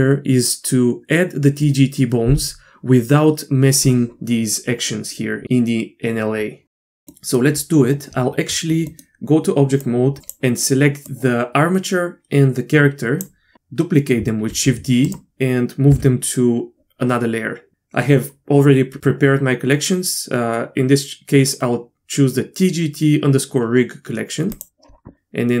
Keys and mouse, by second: 7.1-7.8 middle drag, 8.1 Tab, 10.0 drag, 11.1-13.8 drag, 14.5 shift+d, 15.9 m.